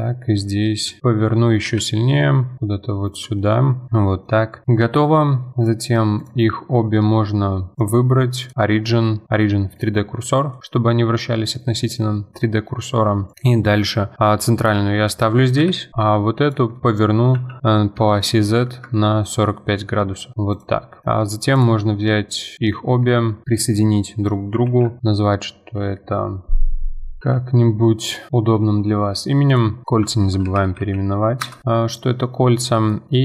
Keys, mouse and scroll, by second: 1.0 scroll up 2, 1.6 g, 3.4-3.7 scroll down 10, 3.8 middle click, 3.9 click, 4.1-5.6 middle drag, 5.6 click, 6.2 shift+click, 7.7 shift+click, 10.2-10.5 scroll down 2, 10.5-13.3 middle drag, 13.3 click, 14.6-15.6 middle drag, 15.6 KP_1, 16.4 click, 16.7 middle click, 17.3 r, 20.3 middle click, 20.5 click, 20.8 middle click, 21.5 click, 22.6 click, 23.4-24.7 middle drag, 24.7 ctrl+j, 29.5 click, 29.8 F2, 32.7 middle click.